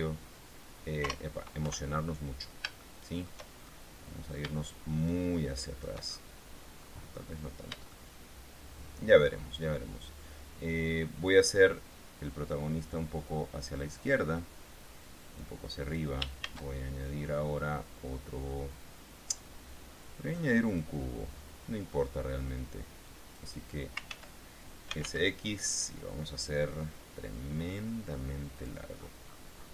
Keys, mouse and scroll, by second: 0.2 KP_0, 1.4 KP_0, 2.0 KP_1, 3.2 shift+click, 3.9-4.6 shift+scroll down 5, 4.9-6.4 shift+drag, 7.2-7.6 scroll up 2, 8.2-9.7 shift+middle drag, 11.6-14.2 drag, 15.7 click, 16.8 shift+a, 21.0 click, 23.4 click, 24.4 ctrl+z, 25.2 s, 25.4 x, 28.9 click, 29.3-29.7 scroll down 1.